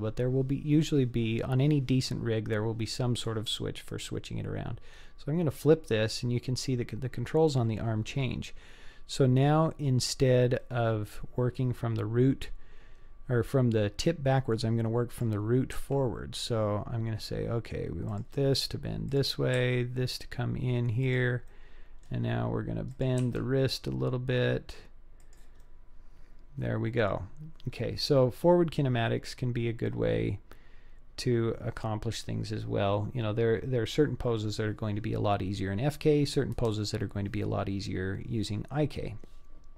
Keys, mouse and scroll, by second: 5.5 click, 10.6-11.6 middle drag, 15.1 click, 15.8 r, 19.1 click, 19.6 r, 21.5 middle click, 22.9 click, 23.3 r, 25.6-27.0 middle drag, 27.1 click, 27.3-27.8 drag, 28.6-29.3 scroll down 4, 29.3-29.6 scroll up 3, 29.9-31.3 middle drag.